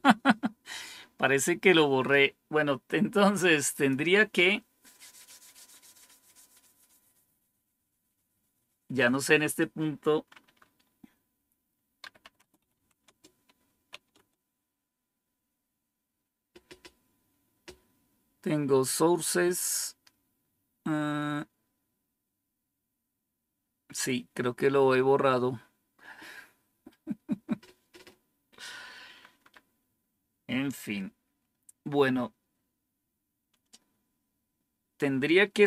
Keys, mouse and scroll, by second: 1.2-1.6 scroll up 2, 1.6-2.0 scroll down 3, 3.6 click, 11.7-14.3 typing.